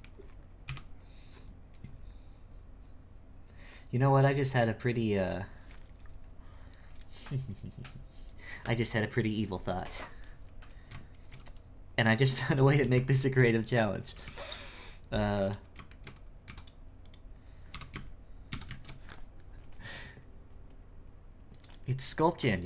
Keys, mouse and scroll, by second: 0.6 KP_1, 11.2-13.8 shift+middle drag, 13.8-14.1 scroll down 2, 14.1 g, 15.9 shift+middle click, 16.4 x, 17.0 right click, 17.7 h, 18.5 shift+c, 18.7 shift+a.